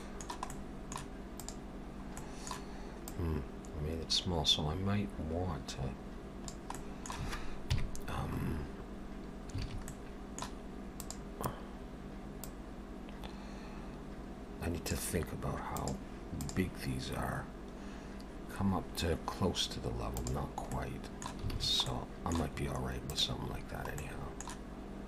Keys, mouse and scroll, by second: 0.5 middle click, 1.4 click, 1.9 scroll up 2, 2.2 middle click, 3.1 click, 6.8 middle click, 7.7 KP_3, 8.3 scroll up 3, 9.5 scroll up 1, 9.6 alt+a, 9.9 middle click, 11.0 click, 12.5 click, 20.8 middle click, 21.6 alt+a, 21.9 middle click, 22.6-23.1 scroll up 1, 23.1 click, 23.1-23.6 scroll up 2, 23.6-24.2 scroll down 2, 24.0 middle click.